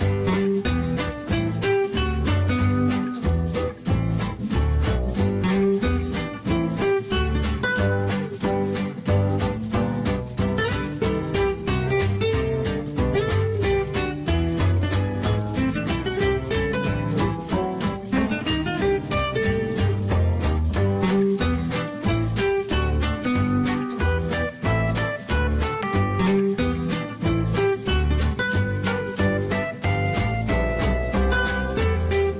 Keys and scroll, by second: 0.8 3, 1.1 0, 1.3 Return, 10.3 ctrl+z, 27.8 ctrl+z.